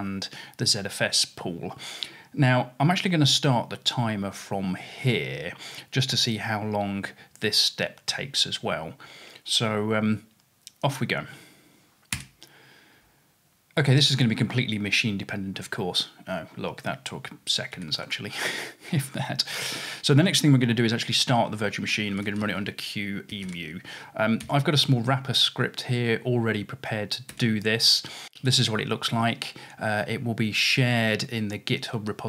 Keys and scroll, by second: 11.4-12.2 typing, 17.8 typing, 21.9-24.5 typing, 27.3 typing.